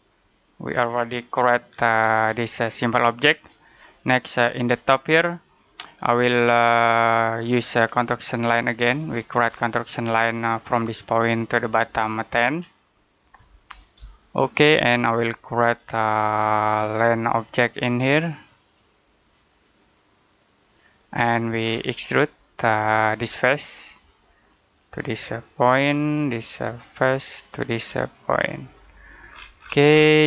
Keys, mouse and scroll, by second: 1.6-2.1 scroll down 1, 2.3 middle click, 8.1 click, 8.6-8.9 scroll down 1, 8.9-9.5 scroll up 1, 10.3 click, 12.3-13.1 typing, 13.9 Return, 15.6 click, 21.0-22.4 scroll down 1, 22.8 click, 29.1 scroll down 1, 29.4-30.2 scroll up 1.